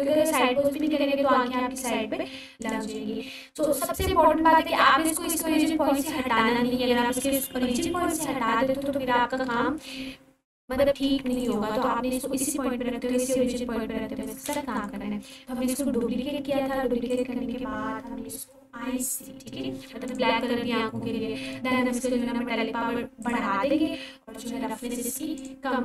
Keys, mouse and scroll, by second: 2.7 click, 8.0 click, 11.3-14.8 drag, 15.6-17.1 scroll down 1, 17.1-18.3 drag, 23.2-25.4 drag.